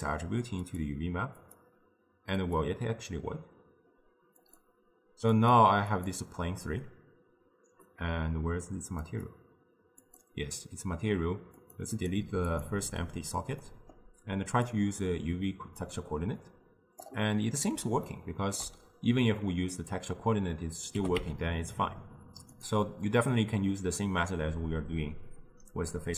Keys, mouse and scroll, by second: 4.4 click, 5.4 click, 6.0 click, 9.1 click, 10.1 click, 11.7 click, 12.0 click, 12.5-13.7 drag, 13.7-14.8 middle drag, 14.8-18.1 drag, 18.1-21.0 ctrl+middle drag, 21.0 g, 25.2-26.1 scroll up 1.